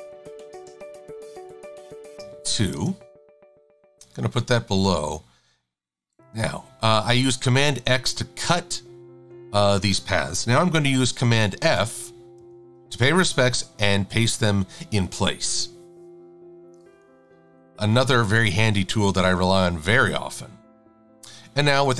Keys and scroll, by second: 1.7 a, 2.8 Return, 17.5 super+=, 17.8 super+=, 17.9 super+=.